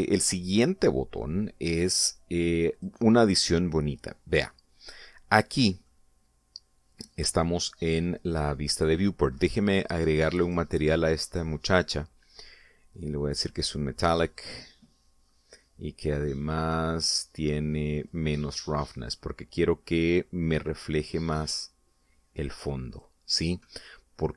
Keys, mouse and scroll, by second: 3.6 click, 5.8 scroll up 1, 6.3 scroll down 1, 6.7-8.7 middle drag, 8.8 scroll up 1, 11.3 click, 12.1 click, 14.3 click, 16.5-17.0 scroll down 2, 19.0-21.2 drag, 21.4-24.0 drag.